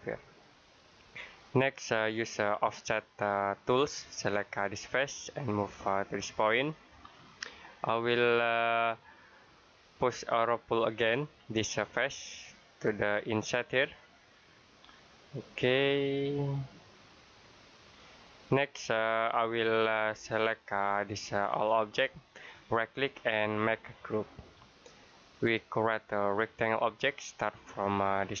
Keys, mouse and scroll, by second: 3.5 click, 11.0 click, 17.6 click, 18.3 middle click, 20.4 click, 22.6 right click, 24.2 click.